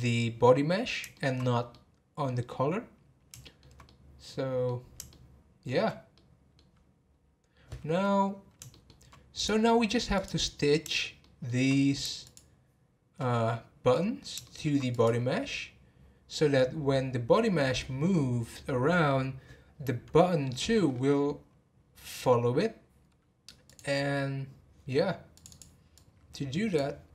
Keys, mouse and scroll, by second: 0.8-1.1 scroll down 3, 1.1 shift+middle drag, 1.4 scroll up 2, 1.7-8.2 middle drag, 8.2 scroll up 2, 8.7-9.3 shift+middle drag, 9.3 click, 10.1 click, 10.4 scroll down 1, 11.0 scroll down 3, 11.2-12.2 shift+middle drag, 12.2 shift+click, 14.4-14.9 shift+middle drag, 14.9 click, 20.8 scroll up 1, 23.6 click, 25.3 click.